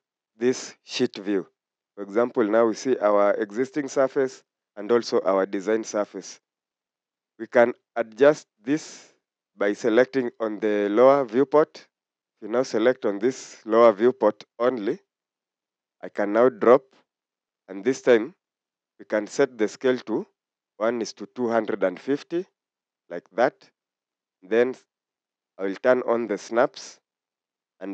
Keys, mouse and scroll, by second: 0.9 scroll up 1.